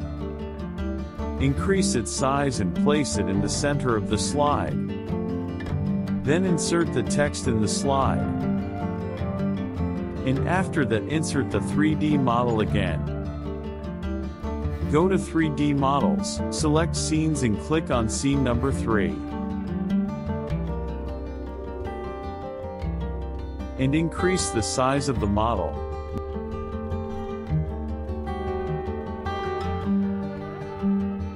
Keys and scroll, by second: 5.6 ctrl+v, 10.4 ctrl+c, 11.9 ctrl+v, 18.8 KP_Subtract.